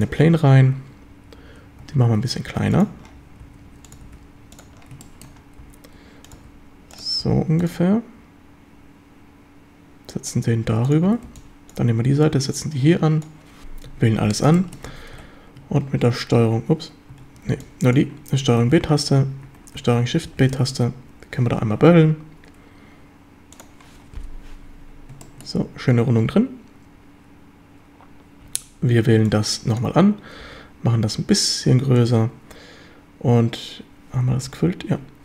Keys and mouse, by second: 1.8 s, 2.8 click, 3.5 s, 4.0 click, 4.1 g, 4.6 click, 5.1 shift+middle click, 5.6 s, 6.3 click, 6.4 g, 7.0 click, 7.2 s, 7.7 click, 7.7 g, 10.9 click, 11.1 a, 11.3 b, 12.3-13.3 drag, 13.9 a, 14.3 a, 14.6 shift+middle drag, 15.2 ctrl+b, 16.5 Escape, 17.2 a, 17.5 b, 18.7 ctrl+b, 19.5 Escape, 20.3 ctrl+shift+b, 23.6 drag, 25.4 shift+drag, 28.5 a, 28.9 a, 29.2 b, 30.4 s, 32.0 click, 34.3 z, 34.9 z.